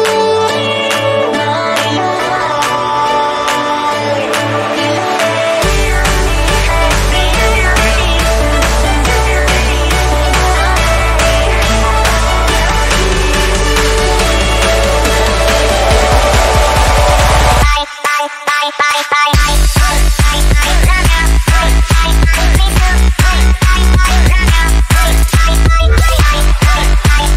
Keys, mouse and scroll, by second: 0.7 BackSpace, 1.4 click, 4.0 click, 5.6 BackSpace, 5.9 click, 7.7 Delete, 8.5 click, 9.6 right click, 10.2 click, 12.0 Delete, 12.7 z, 12.8 right click, 13.1 click, 14.0 ctrl+d, 15.0 click, 16.0 right click, 16.3 click, 17.1 space, 17.2 click, 17.4 space, 17.6 click, 18.1 space, 20.9 v, 20.9 click, 21.1 space, 21.6 Down, 22.4 right click, 22.9 click, 27.0 right click.